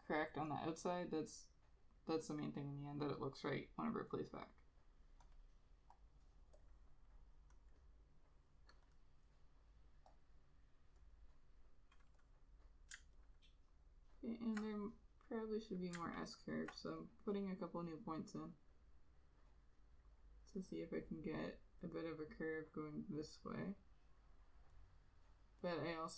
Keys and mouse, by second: 5.5 double click, 9.0 double click, 13.3 alt+click, 16.2 alt+click.